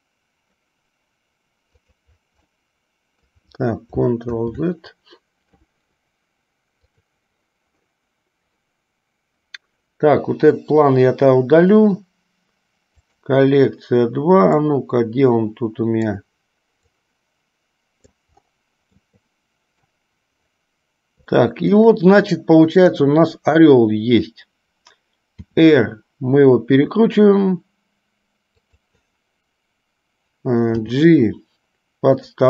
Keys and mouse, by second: 1.8 click, 2.7-3.5 middle drag, 7.0 click, 13.0 click, 14.7-16.3 drag, 17.2-18.4 drag, 19.3 shift+middle click, 21.5 shift+middle click.